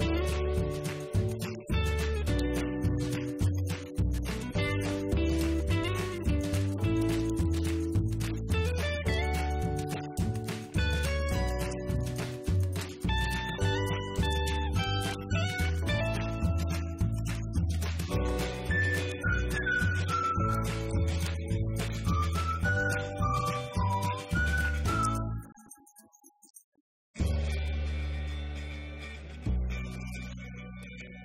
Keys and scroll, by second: 1.8 Right, 2.0 Left, 3.4-4.9 typing, 6.1 Up, 6.4 F2, 6.6 Left, 7.6-14.2 typing, 7.8 Right, 14.6 Right, 14.9 Left, 15.1 Down, 17.6 Up, 21.3 shift+Right, 22.4 shift+Down, 23.6 shift+Up, 24.2 shift+Down.